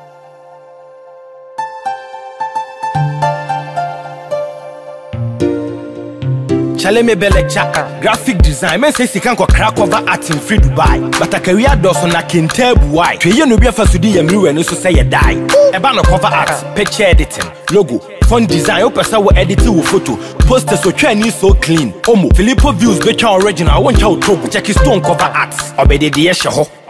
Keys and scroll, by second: 7.0 ctrl+=.